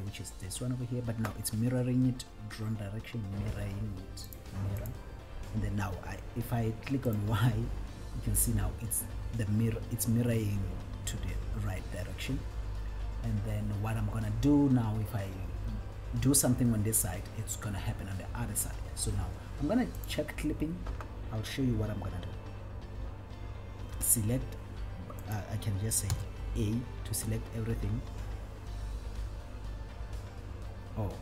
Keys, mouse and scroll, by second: 4.5-4.8 drag, 7.2 drag, 8.6 click, 20.1 click, 24.1 b, 26.4 a.